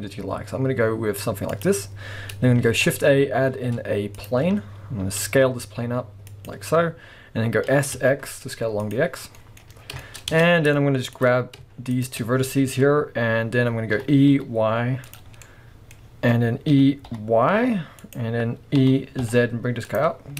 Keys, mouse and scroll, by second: 2.6 shift+a, 4.6-5.0 scroll down 1, 5.0 s, 6.4 click, 7.7 s, 8.9 click, 9.1 scroll down 1, 9.3-11.2 middle drag, 9.6 scroll up 1, 9.7 scroll down 2, 10.3 Tab, 10.7 scroll up 1, 11.2 click, 11.9 shift+click, 14.0 e, 15.2 click, 15.3 scroll down 1, 15.4-18.1 middle drag, 15.9-16.7 scroll up 2, 16.7 e, 18.1 click, 18.8 e, 20.0 click, 20.2 scroll down 2.